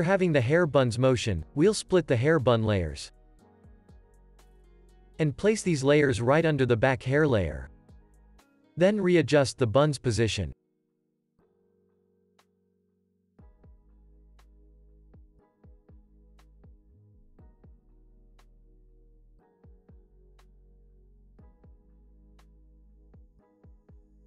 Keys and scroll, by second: 4.5 shift+super+d, 22.9 u.